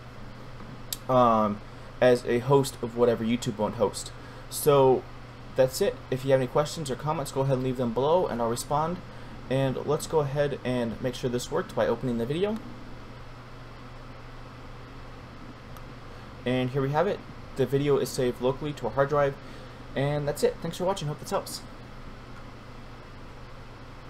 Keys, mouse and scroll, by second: 11.2 click, 22.2 F9.